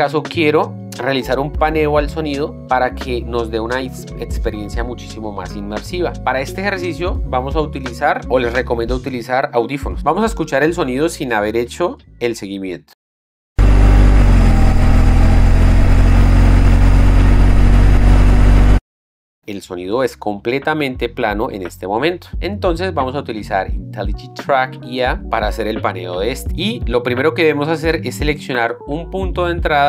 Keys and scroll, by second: 13.8 space, 19.0 space.